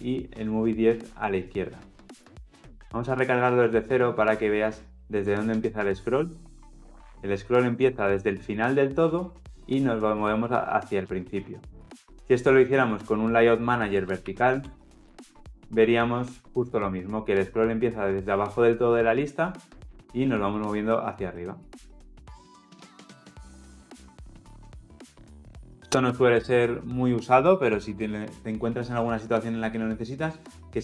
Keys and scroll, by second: 3.4 shift+F10, 14.8 Return, 16.7 shift+F10.